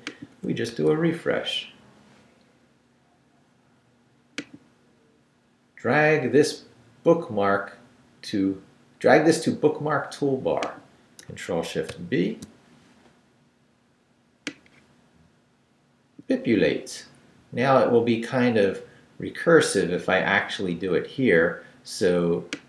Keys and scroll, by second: 0.7 super+r, 11.9 shift+super+b.